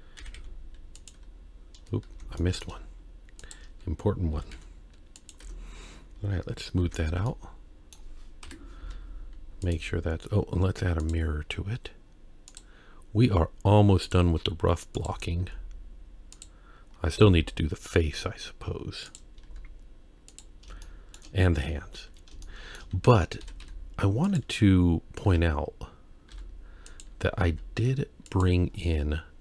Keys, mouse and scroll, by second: 0.2 g, 2.1 ctrl+z, 2.4 middle click, 3.4 shift+click, 4.3 g, 5.5 Tab, 6.8 ctrl+3, 7.3-8.0 middle drag, 8.5 KP_1, 8.8 z, 10.0-11.0 scroll down 2, 11.0-12.6 drag, 14.0 click, 15.4 z, 16.8-17.2 scroll down 2, 17.2 z, 19.5 z, 20.8 shift+middle drag, 21.8-22.3 scroll up 1, 22.4-22.8 shift+middle drag, 23.4 s, 25.3 s, 27.5 g, 28.7-29.4 scroll down 1.